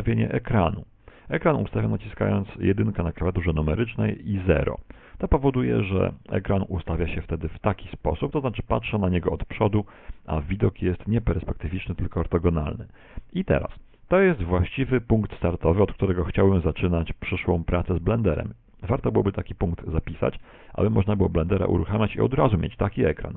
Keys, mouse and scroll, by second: 2.5 KP_1, 4.3 KP_5, 6.2 KP_1.